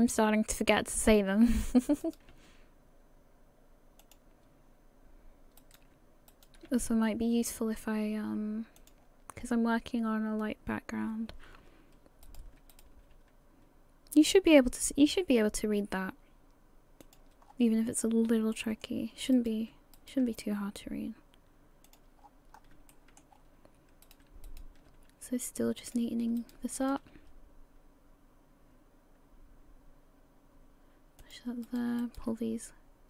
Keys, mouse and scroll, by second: 1.5 right click, 2.0 shift+right click, 5.6 right click, 6.3 shift+right click, 6.7 g, 9.4 scroll down 3, 10.1 scroll down 1, 11.4-12.3 scroll up 1, 12.3 right click, 12.7 shift+right click, 13.1 g, 17.5-17.9 scroll down 3, 17.9 scroll up 2, 18.5 shift+middle click, 19.4 right click, 20.0 shift+right click, 20.3 g, 22.2 scroll down 5, 22.6-22.9 scroll up 2, 22.9 shift+middle click, 23.3 scroll up 2, 24.1 right click, 24.5 shift+right click, 24.9 g, 26.4 right click, 26.8 shift+right click, 27.2 g, 31.7 right click, 32.0 shift+right click, 32.3 shift+g.